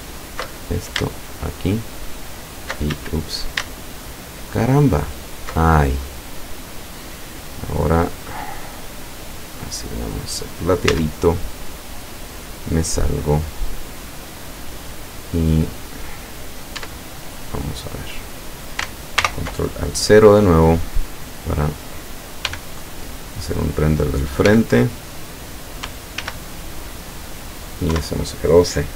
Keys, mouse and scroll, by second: 0.6 alt+shift+right click, 1.3 alt+shift+right click, 2.2 alt+shift+right click, 2.9 alt+shift+a, 3.8 alt+shift+right click, 5.1 alt+shift+right click, 5.8 scroll down 2, 7.6 click, 9.6 click, 10.9 z, 11.4-11.8 scroll down 2, 12.1-14.8 middle drag, 15.6 middle click, 16.9 Tab, 19.3 ctrl+alt+KP_0, 20.4-20.8 scroll down 2, 21.5 right click, 22.5 g, 22.7 click, 23.5 click, 25.2 click, 26.2 ctrl+s, 27.2 click, 27.9 F12.